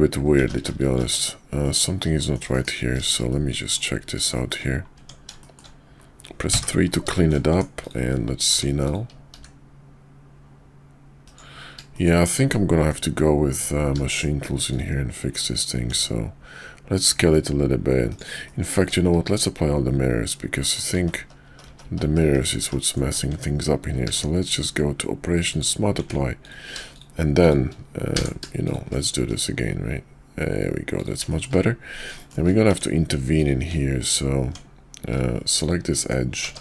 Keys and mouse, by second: 0.4-0.7 ctrl+z, 1.6 middle click, 2.2 shift+middle click, 2.5 KP_5, 3.3 middle click, 5.0 Tab, 5.4 shift+middle click, 6.4 3, 7.1 shift+middle click, 7.5 Tab, 7.8 click, 9.3 s, 11.9 middle click, 12.5 middle click, 14.1 shift+middle click, 15.9 s, 18.4 middle click, 18.8 Tab, 19.1 q, 20.6 middle click, 21.0 ctrl+z, 21.2 ctrl+z, 21.4 ctrl+z, 21.6 ctrl+z, 21.8 ctrl+z, 22.0 ctrl+z, 22.2 ctrl+z, 23.3 Tab, 23.9 q, 26.0 Tab, 26.4 click, 26.9 shift+click, 28.1 f, 28.6 shift+click, 31.3 middle click, 32.2 shift+middle click, 32.7 Tab, 33.3 click, 35.5 ctrl+click, 36.4 ctrl+z.